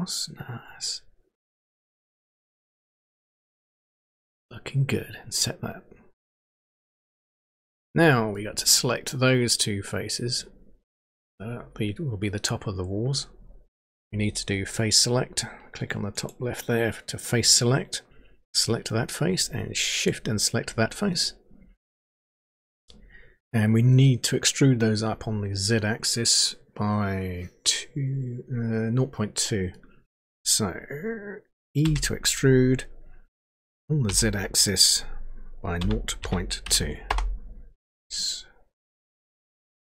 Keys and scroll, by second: 31.9 e, 35.8-37.1 typing.